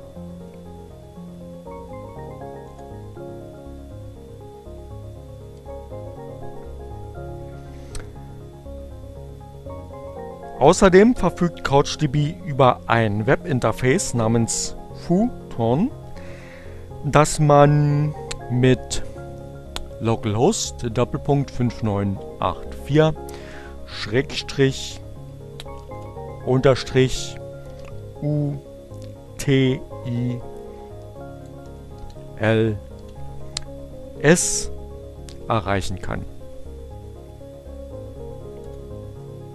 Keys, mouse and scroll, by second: 1.3 Up, 1.5 Return, 4.0 Return, 22.3 click, 24.4 shift+-, 26.9-28.2 typing, 29.5-30.3 typing, 32.1 shift+7, 37.2 Return.